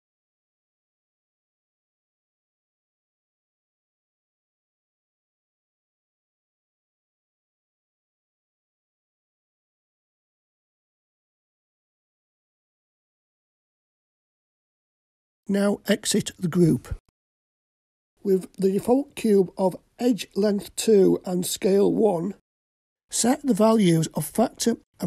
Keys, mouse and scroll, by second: 0.2 g, 1.7 g, 3.9-4.3 scroll down 2, 4.3 middle click, 6.3 click, 8.0-16.0 drag, 16.8 Tab, 18.1-18.6 drag, 18.6-19.7 scroll up 5, 19.7-20.3 middle drag, 20.6-21.1 scroll up 2, 22.8-25.0 drag.